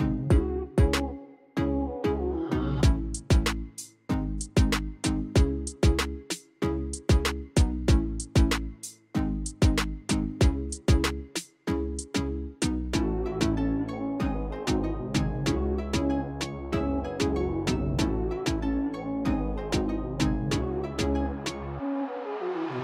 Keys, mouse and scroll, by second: 1.7 click, 3.2-3.9 scroll down 2, 4.2-4.7 scroll down 1, 5.0 click, 5.4-7.1 scroll down 1, 7.2-10.3 scroll down 1, 12.3-13.0 scroll down 1, 13.0-13.3 scroll up 1, 14.2 click, 14.6 click, 15.6-16.2 scroll down 1, 16.8 click, 17.2 scroll down 2, 17.5 middle click, 18.0-18.4 scroll up 2, 18.4 middle click, 19.8 click, 20.2 click, 20.5 click, 21.2 click, 21.5 drag, 21.8 drag, 22.1 click, 22.4 click, 22.7 drag.